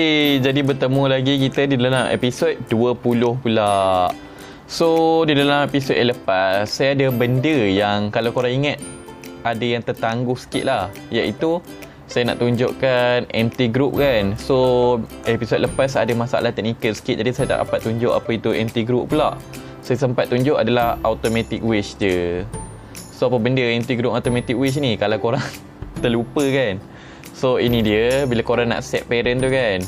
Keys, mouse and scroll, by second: 0.0-3.6 middle drag, 4.2-4.6 scroll down 2, 4.8 middle click, 22.0 click, 22.7-23.5 scroll up 7, 23.9-24.8 scroll down 2, 24.8-25.5 scroll down 1, 27.8 click, 29.5 shift+click.